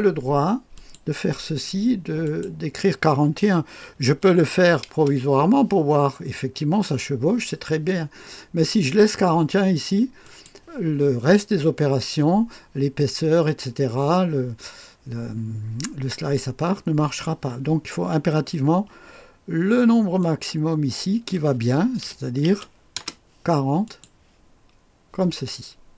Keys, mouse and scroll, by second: 0.7 click, 2.2 click, 4.1 KP_4, 4.3 KP_1, 4.9 Return, 10.2 click, 20.2 click, 22.0 BackSpace, 22.5 KP_0, 22.9 Return, 23.8 click, 24.6 click.